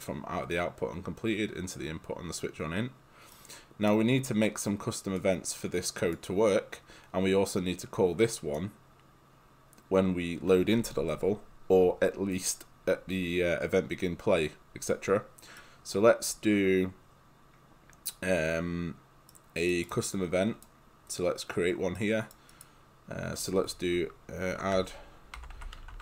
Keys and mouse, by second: 3.4 right click, 5.2 click, 6.2 click, 8.6 click, 15.6 right click, 19.3 right click, 19.8 click, 20.1 right click, 24.8-26.0 typing.